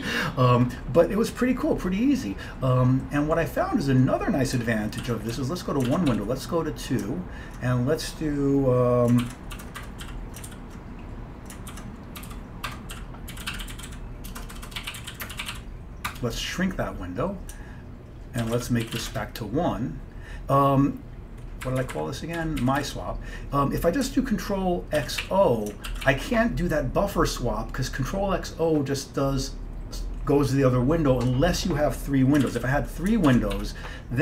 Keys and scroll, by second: 5.1 ctrl+x, 5.4 1, 6.0 ctrl+x, 6.2 2, 9.3 ctrl+u, 9.4-10.6 typing, 11.8 ctrl+u, 12.0-19.6 typing, 16.2 Return, 21.7 Up, 21.9 Up, 22.0 Up, 22.5 Down, 22.7 Down, 22.9 Down, 25.1 ctrl+x, 25.3 o, 26.0 ctrl+x, 26.1 o, 32.5 ctrl+x, 32.7 o, 33.4 ctrl+x, 33.6 3.